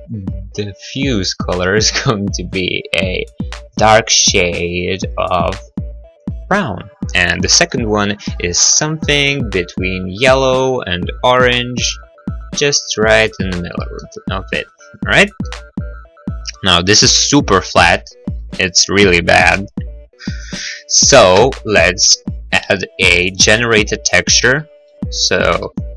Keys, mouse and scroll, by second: 0.1 click, 4.0 click, 7.5 click, 8.3 click, 14.1 middle click, 14.8 middle click, 15.5 middle click, 21.4 shift+a.